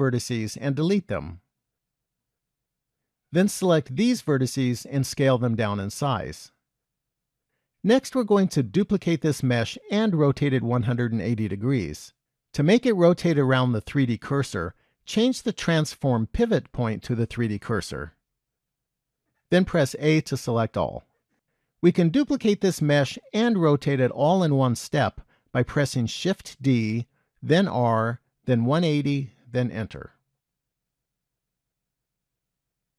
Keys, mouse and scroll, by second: 0.2 click, 1.9 x, 4.2 click, 5.6 s, 15.5 click, 20.0 a, 26.3 shift+d, 31.1-32.5 scroll down 2, 32.6 shift+middle click.